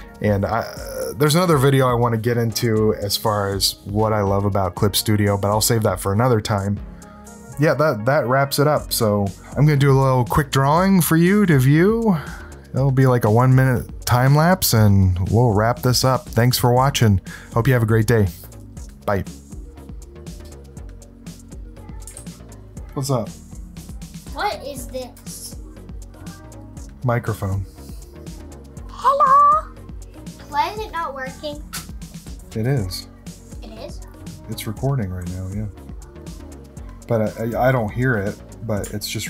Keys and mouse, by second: 20.9 ctrl+alt+click, 21.5 click, 21.9 click, 22.4 click, 23.2 click, 23.9 s, 24.6 click, 24.7 click, 24.9 click, 25.2 click, 25.9 click, 26.4 click, 26.9 s, 27.4 click, 27.8 space, 27.9 click, 28.2 click, 28.4 click, 28.9 click, 29.4 click, 30.2 click, 31.0 click, 31.3 click, 31.6 x, 31.6 click, 32.0 click, 32.7 d, 32.8 ctrl+alt+click, 33.2 ctrl+alt+click, 33.9 click, 34.4 click, 34.5 click, 35.1 click, 35.6 click, 35.9 click, 35.9 space, 36.1 click, 36.8 click, 37.3 click, 37.6 click, 38.3 space, 38.4 click, 38.7 click, 39.2 space.